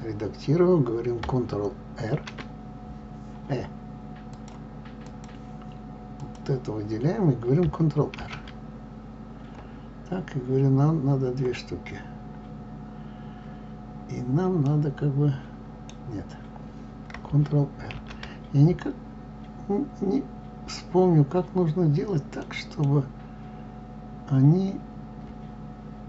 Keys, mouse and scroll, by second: 5.0-6.2 drag, 8.1 ctrl+r.